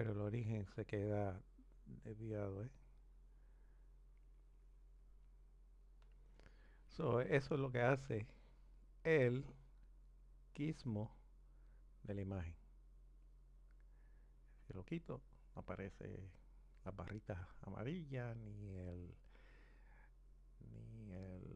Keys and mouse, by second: 1.3 click, 13.2-14.7 drag, 18.8 click.